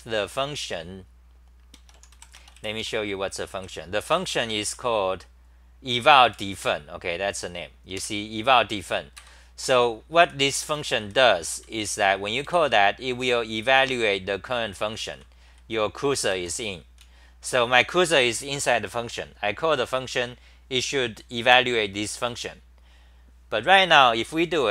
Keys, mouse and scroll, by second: 3.5-7.1 typing, 8.0 super+=, 9.2 ctrl+g, 10.7 g, 11.0 1, 11.5 ctrl+g, 11.8 w, 12.4 3, 14.0-14.6 c, 15.1 c, 15.5 1, 16.3 ctrl+g, 17.0-17.5 t.